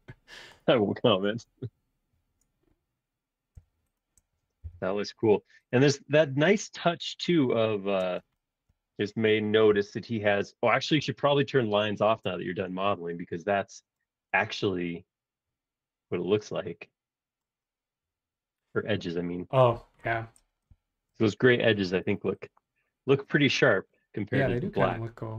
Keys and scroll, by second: 4.6 m, 8.0 space, 9.7 m, 12.2 space, 12.5 ⟲, 23.4 Escape, 23.6 Escape, 24.8 Escape, 25.0 Escape.